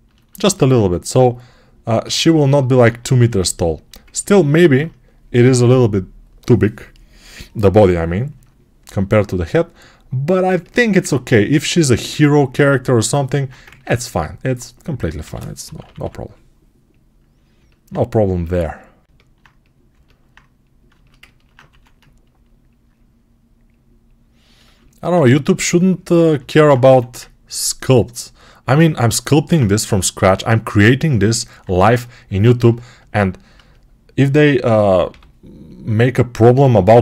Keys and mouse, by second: 13.5 ctrl+Tab, 14.3-24.5 drag, 15.1 g, 15.5 ], 15.7 ], 21.5 1, 24.5-31.0 alt+shift+right drag, 26.7 1, 29.7 g, 34.9 g, 36.6-37.0 alt+drag.